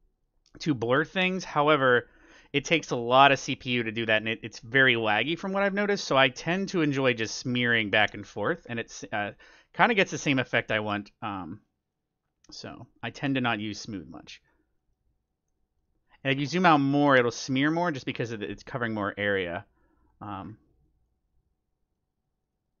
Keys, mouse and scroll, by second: 0.7-3.9 drag, 4.4-6.3 middle drag, 6.3-9.1 drag, 8.4 scroll down 1, 8.7-10.3 middle drag, 9.2-22.8 drag, 14.4-14.7 scroll down 1, 14.7-16.4 middle drag, 17.3-17.7 scroll up 1, 17.7-19.5 middle drag, 19.5-20.0 scroll up 1, 20.4-22.2 scroll down 1, 22.2 scroll down 1.